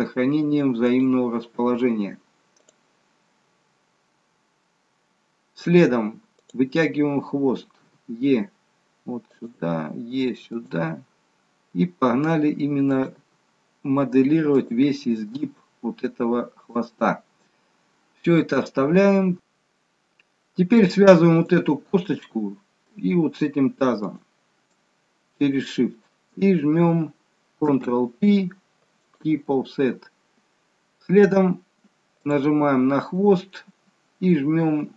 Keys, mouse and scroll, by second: 6.4 click, 7.8 e, 9.6 e, 13.1 e, 14.9 e, 19.3 KP_3, 21.3 click, 24.0 shift+click, 27.7 ctrl+p, 31.5-32.2 scroll up 1, 32.2 click.